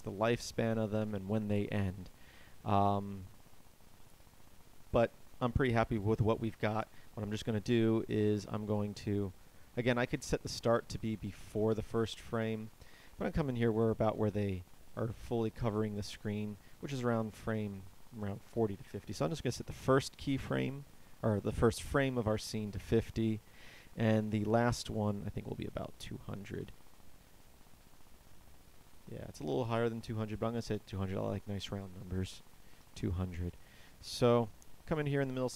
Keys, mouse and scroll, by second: 7.0 Escape, 8.2-25.2 drag, 32.5 KP_0.